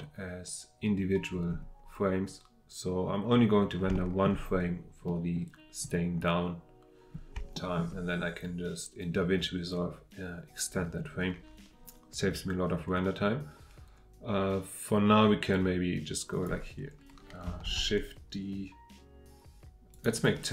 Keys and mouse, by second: 3.9 shift+middle drag, 5.0 middle click, 7.5 shift+middle drag, 15.5-16.5 drag, 17.6 shift+d, 19.9 click.